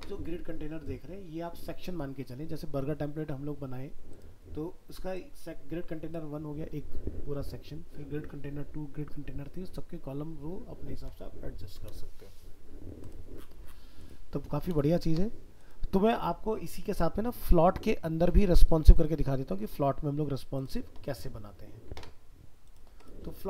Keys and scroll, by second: 17.7 ctrl+w.